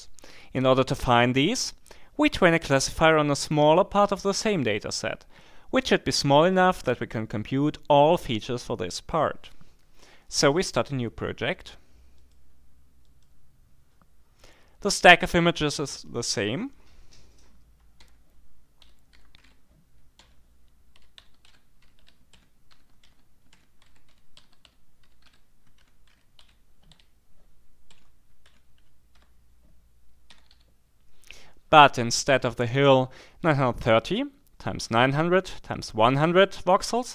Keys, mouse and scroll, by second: 12.2 click, 13.0-13.7 scroll up 1, 14.9-15.6 scroll up 1, 18.0-30.3 typing.